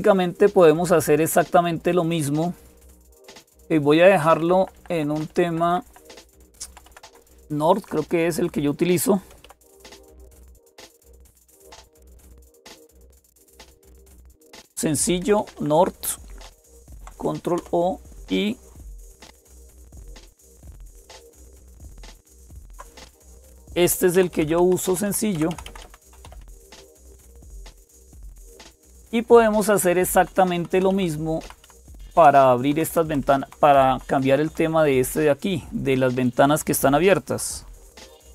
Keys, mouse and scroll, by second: 0.0-38.3 typing, 3.3 click, 4.2 Left, 4.4 Left, 4.6 Left, 4.7 Left, 4.9 Left, 5.2 Left, 5.4 Left, 5.6 Left, 5.8 Left, 6.4 Left, 6.7 Left, 6.8 Left, 10.5 Delete, 11.7-13.9 Delete, 15.2 Right, 16.6 Right, 16.6 Left, 20.7 ctrl+o, 20.7 Return, 22.3 super+Escape, 22.3 alt+s, 24.3 alt+super+d, 24.7 Down, 24.8 Down, 25.1 Down, 25.3 Down, 25.3 Up, 25.4 Up, 25.6 Up, 26.0 Down, 26.0 Up, 26.2 Down, 26.5 Down, 26.5 Up, 33.5 Up, 33.5 Escape, 33.5 Down, 33.5 Left, 33.7 Left, 38.0 alt+super+Tab.